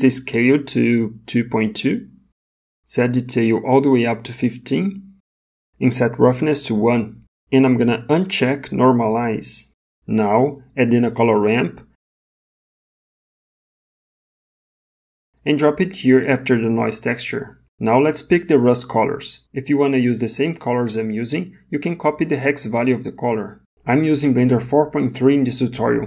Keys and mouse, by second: 0.1-2.8 drag, 4.0-5.6 drag, 6.7 click, 9.0 click, 11.1 shift+a, 20.2 click.